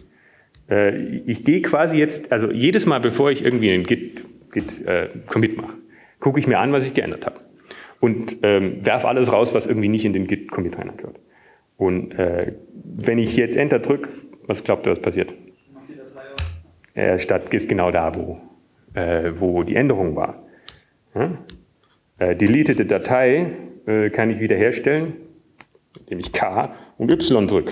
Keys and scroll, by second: 0.0-1.1 typing, 6.0 typing, 15.8 typing, 20.0 Return, 26.2 Up.